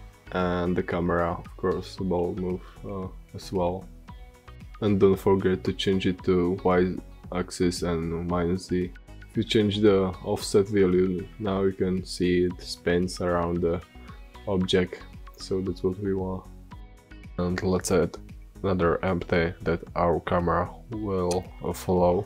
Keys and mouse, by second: 1.6 click, 3.5 middle drag, 5.2-6.1 drag, 9.3-11.3 drag, 15.7-18.9 drag, 18.7 shift+a.